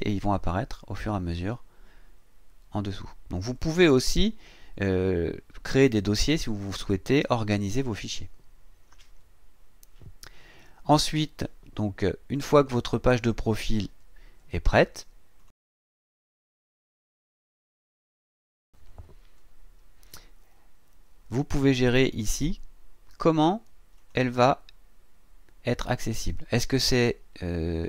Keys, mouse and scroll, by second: 12.5 click, 15.4 click, 15.6 click, 18.3 click, 23.9 click.